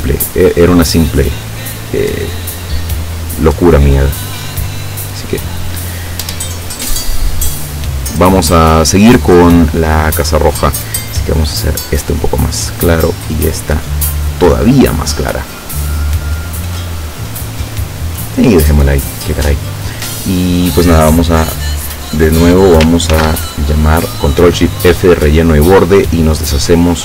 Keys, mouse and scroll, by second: 0.4 click, 1.7 click, 3.0-5.5 drag, 6.9 click, 7.3 click, 11.9 click, 13.2 click, 14.7 click, 21.8 click, 23.1 ctrl+shift+f, 26.4 click.